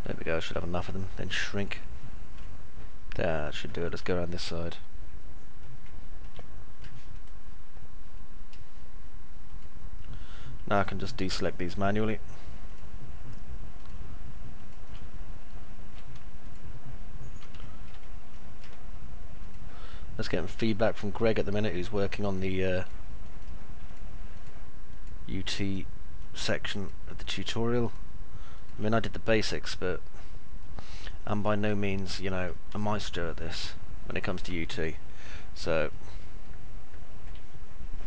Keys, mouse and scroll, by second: 2.4-3.4 alt+middle drag, 3.6 middle click, 3.9-5.6 alt+middle drag, 5.8 alt+middle click, 6.4 middle click, 7.1-9.4 right drag, 11.1 ctrl+click, 12.6 ctrl+click, 14.9 alt+middle click, 17.6 alt+middle click, 18.1 middle click, 18.1 scroll up 1, 20.4 ctrl+click, 22.1 ctrl+click, 23.1 ctrl+click, 23.8 ctrl+click, 24.8 ctrl+click, 26.1 ctrl+click, 26.6 ctrl+click, 27.8 ctrl+click, 29.4-31.6 alt+middle drag, 31.9 middle click, 33.9 ctrl+click, 34.8 middle click, 36.4 alt+middle click.